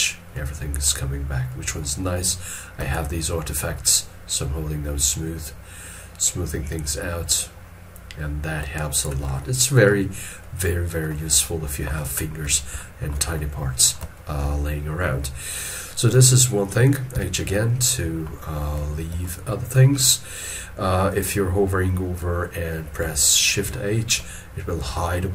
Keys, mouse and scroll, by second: 0.3 middle click, 2.9 shift+click, 9.4 middle click, 12.8 shift+middle click, 17.8 middle click, 19.2 shift+middle click, 23.6 shift+h.